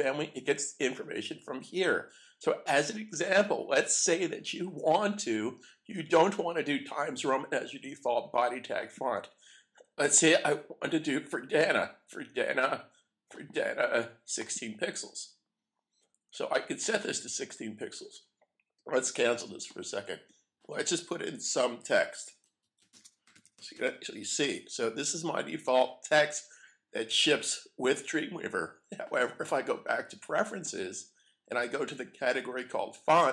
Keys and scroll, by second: 21.9-25.9 typing.